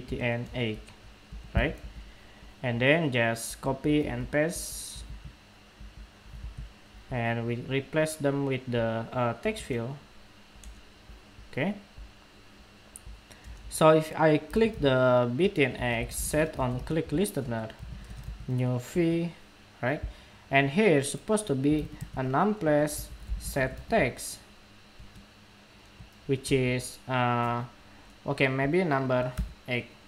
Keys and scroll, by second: 1.5 super+d, 3.7 super+c, 4.9 super+v, 6.2 super+v, 7.4 super+v.